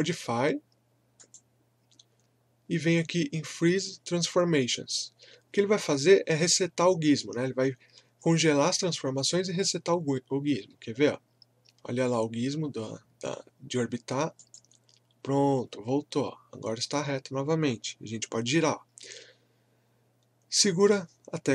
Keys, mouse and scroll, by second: 1.2 click, 14.3 click.